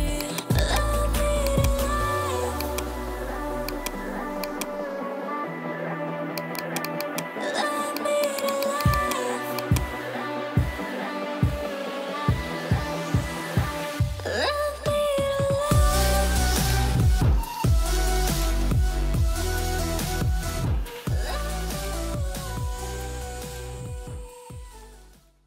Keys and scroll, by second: 13.7 ctrl+0.